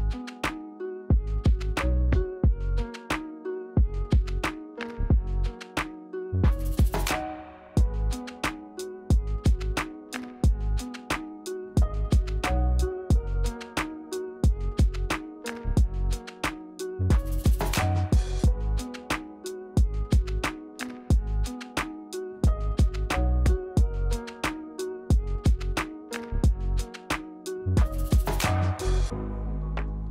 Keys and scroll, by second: 0.2 ctrl+z, 1.3 q, 3.6 r, 8.7 w, 21.6 r, 23.9 g.